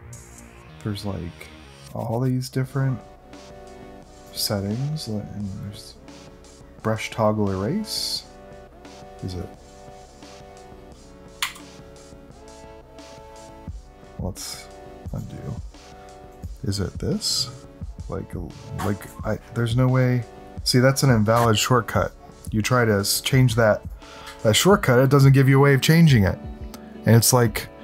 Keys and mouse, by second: 8.0 click, 11.4 m, 15.0 click, 16.3 click, 19.0 `, 22.7 click, 23.1 click, 23.8 click, 25.0 click.